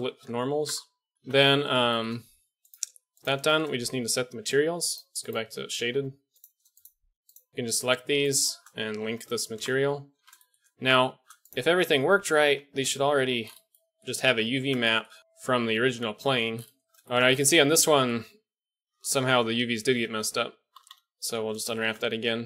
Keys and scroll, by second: 0.6 Tab, 1.1 Tab, 1.1 a, 1.2 KP_1, 9.0 ctrl+l, 10.1 a, 11.6 Tab, 12.2 a, 12.4 a, 14.2 Tab, 16.0 a, 16.9 shift+x, 18.8 KP_1, 19.8 ctrl+l, 20.7-22.4 typing.